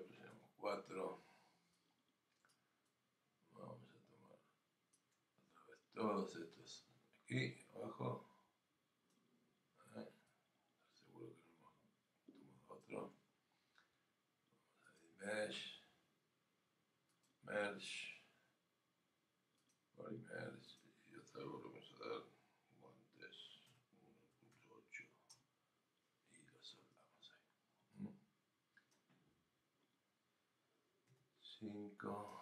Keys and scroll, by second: 25.0-25.7 typing, 31.2 5.